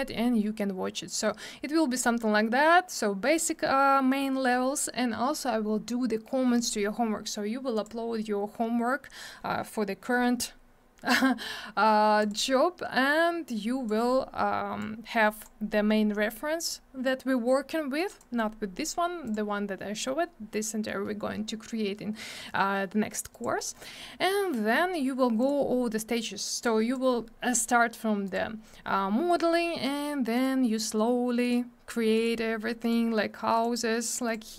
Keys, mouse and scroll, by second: 12.4 click, 13.5 click, 14.8 click, 16.6 click, 19.2 click, 19.3 click, 23.3 click, 23.4 click, 25.4 click, 25.4 click, 26.6 click, 28.2 click, 28.3 click, 30.3 click, 31.4 click, 32.1 click, 32.8 click, 33.5 click, 33.6 click, 34.2 click.